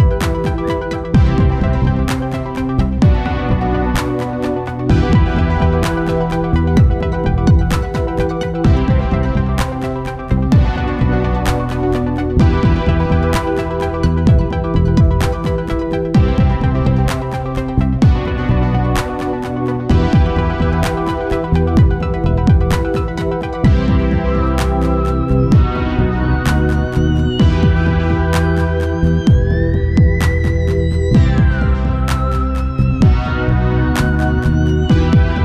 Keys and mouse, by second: 0.0 middle click, 1.1 KP_0, 1.2 middle click, 2.1 shift+f, 4.3-6.2 drag, 8.0-9.7 drag, 13.5-15.0 drag, 32.6-34.2 drag.